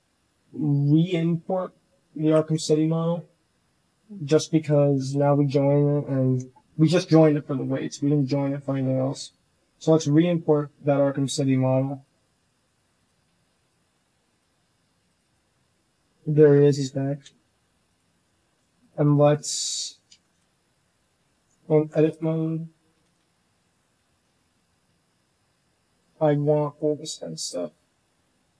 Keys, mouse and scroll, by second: 0.0 Tab, 2.2 Delete, 4.7 alt+h, 5.1 drag, 5.6 Return, 5.8 Delete, 7.1 Delete, 7.2 click, 7.6-17.3 drag, 17.3 h, 17.9 h, 18.3 shift+drag, 19.0 shift+drag, 20.8 shift+click, 21.3 Tab, 21.6 shift+middle click, 22.5 k, 23.1 l, 23.9 shift+middle click, 25.6 middle click, 26.0 z, 26.3 middle click, 26.6 c.